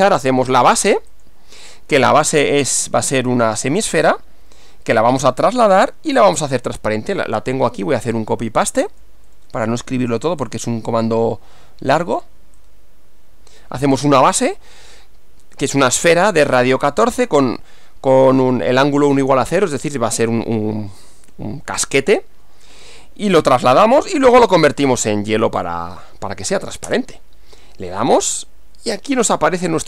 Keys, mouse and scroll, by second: 1.1 click, 2.6 click, 3.9 right click, 7.4 click, 8.9 click, 10.5 click, 12.7-13.8 drag, 25.6 click, 26.9 Return, 28.9-29.8 middle drag.